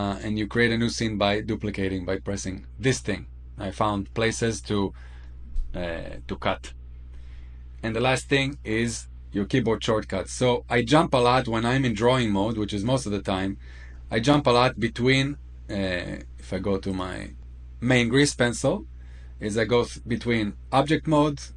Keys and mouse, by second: 12.0 click, 14.2-14.8 middle drag, 16.9 click.